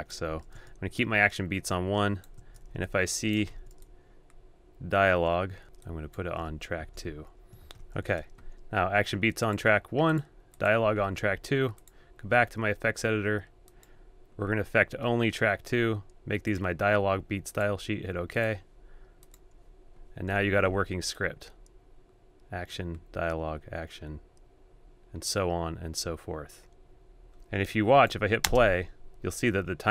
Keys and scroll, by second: 3.9 shift+super+a, 20.3 super+a.